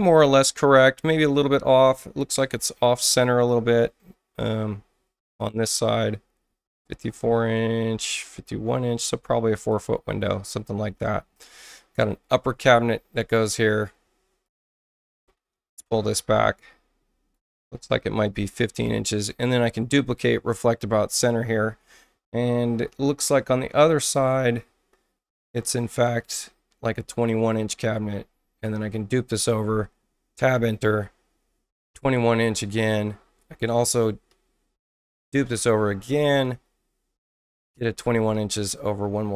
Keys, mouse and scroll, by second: 4.4 ctrl+click, 6.9 ctrl+click, 9.0 ctrl+click, 14.4 ctrl+click, 14.9 ctrl+click, 15.8-17.3 ctrl+drag, 18.8 ctrl+alt+c, 19.9 click, 26.1-27.5 drag, 27.9 ctrl+alt+c, 28.6 click, 29.3 Return, 30.0-30.8 typing, 34.2 Return, 34.8 space, 35.2 click, 35.5 ctrl+alt+c, 36.4-37.7 drag, 37.4 Return, 37.8-38.6 typing.